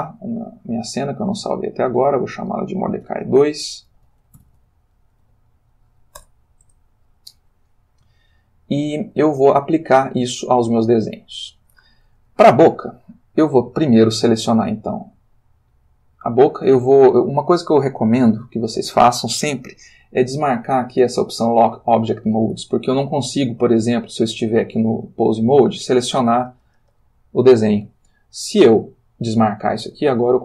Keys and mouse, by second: 2.2 click, 3.0-4.5 typing, 6.2 Return, 8.8-10.4 shift+middle drag, 10.8-12.0 ctrl+middle drag, 12.8 click, 15.1 click, 20.3 click, 23.0 click, 24.0 click, 25.9-27.4 drag, 28.5 click, 29.5 click.